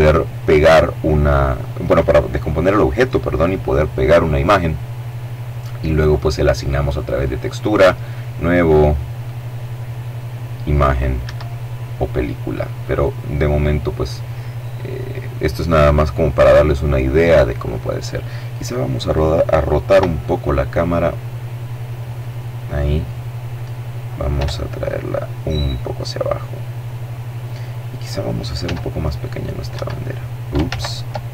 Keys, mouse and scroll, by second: 6.3 click, 7.2 click, 8.5 click, 10.5 Escape, 12.1 click, 13.1-13.7 scroll up 1, 14.0 click, 18.3 right click, 19.1 r, 21.4 click, 23.5 g, 25.2 click, 26.8 right click, 27.8 s, 28.9 Escape, 29.9 ctrl+z, 30.7 ctrl+right click.